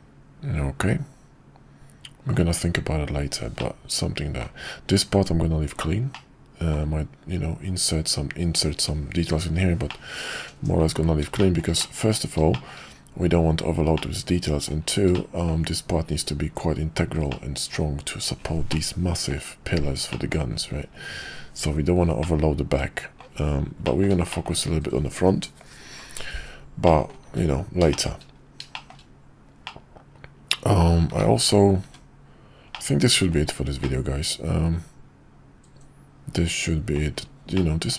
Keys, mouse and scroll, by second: 3.6-4.4 middle drag, 6.1-6.7 middle drag, 9.9-10.9 middle drag, 11.4 shift+middle drag, 11.8-12.1 middle drag, 12.5 shift+middle click, 13.9-14.6 middle drag, 15.1-15.5 middle drag, 17.3-17.7 middle drag, 18.7-19.3 middle drag, 20.1 middle drag, 22.2-23.2 middle drag, 23.8 shift+middle drag, 24.3 middle drag, 26.8 middle drag, 27.3 `, 27.9 shift+middle drag, 28.7 shift+middle click, 29.6-30.8 middle drag, 31.8 `, 32.7-33.4 middle drag, 33.8-36.9 middle drag, 37.5-37.9 middle drag.